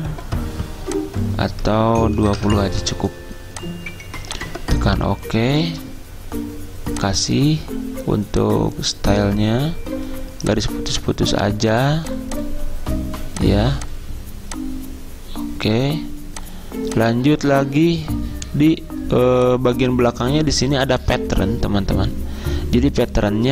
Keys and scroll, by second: 2.1-2.8 typing.